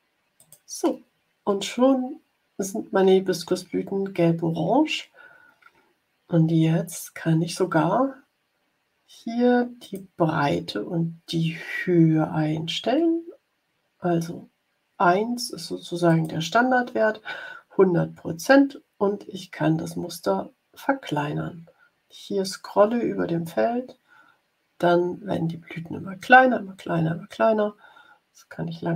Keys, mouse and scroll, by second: 0.3 click, 9.7 click, 16.0 click, 18.3 scroll down 1, 19.4 scroll down 1, 20.5-21.0 scroll down 2, 22.6 scroll down 1, 23.3 scroll down 2, 24.5 scroll down 2, 25.2 scroll down 2, 26.6 scroll down 2.